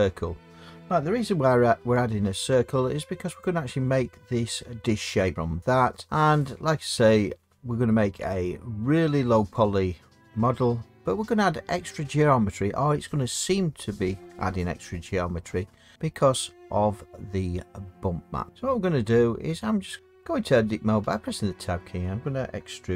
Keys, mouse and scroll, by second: 2.0 s, 3.4 click, 21.0 Tab.